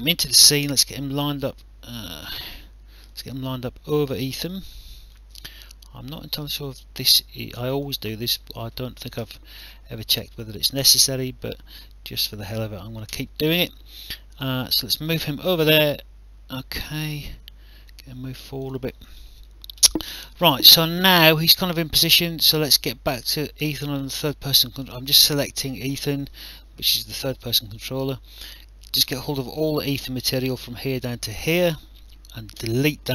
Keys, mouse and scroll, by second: 3.1 click, 4.6 alt+click, 5.6 click, 7.2 click, 7.8 alt+click, 9.2 e, 9.6 r, 10.2 click, 13.1 w, 14.1 click, 15.3 alt+click, 17.9 click, 18.9 alt+click, 23.2 click, 27.1 click, 28.3 click, 29.8 shift+click, 32.6 Delete, 32.6 KP_Decimal.